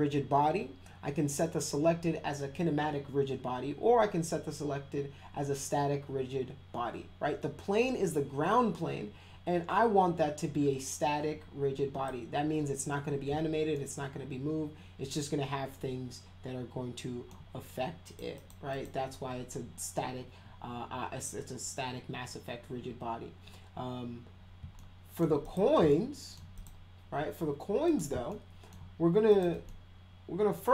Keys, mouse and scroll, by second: 13.7-17.3 alt+middle drag, 18.0 click, 18.4 click, 18.7 click, 24.7-25.2 alt+middle drag, 25.4 click, 25.9 alt+middle click, 26.6 click, 27.9 click, 28.3 alt+middle click, 29.3 click, 29.7-30.7 alt+middle drag.